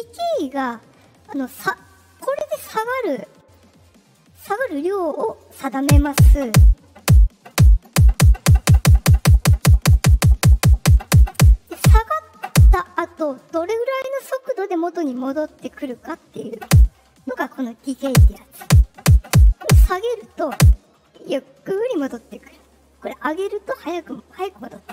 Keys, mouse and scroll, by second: 2.3 click, 3.1 click, 7.0-11.3 drag, 15.8 click, 19.7 click, 23.0 click, 24.3 drag.